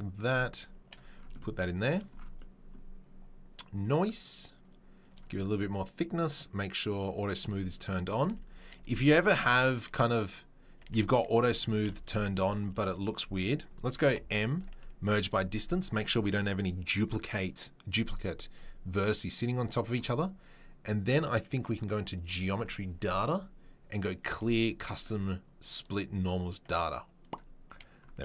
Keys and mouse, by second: 4.6-6.3 right drag, 6.3-9.0 middle drag, 8.2 Tab, 8.8 Tab, 9.0 click, 9.2-10.2 middle drag, 10.2 click, 10.3-28.2 middle drag, 10.8 Tab, 11.6 Tab, 12.2 Tab, 13.2 a, 14.0 m, 22.2-28.2 drag.